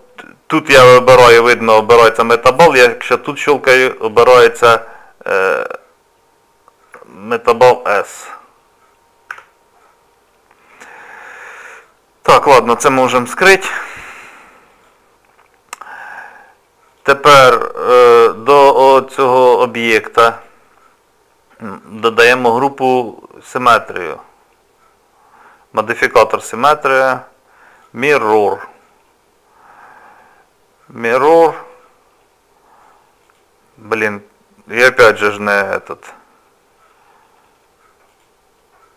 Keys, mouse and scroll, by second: 2.8 click, 7.1 shift+middle click, 12.3 click, 14.7 click, 20.3 click, 23.9 click, 33.2 click, 38.1 click.